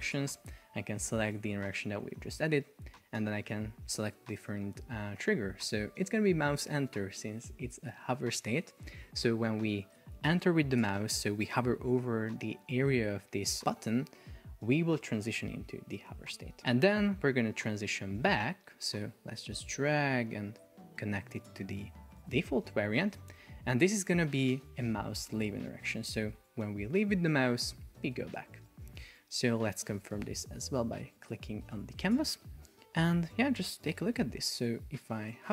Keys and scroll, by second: 34.0 super+p.